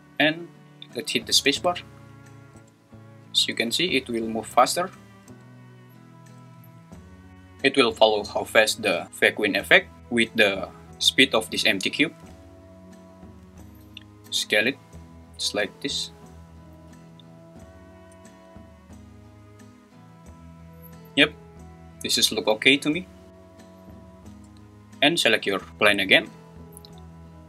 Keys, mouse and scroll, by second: 0.9 click, 1.5 space, 12.2 space, 14.3 s, 16.7 g, 17.8 click, 18.1 space, 24.3 space, 25.6 click.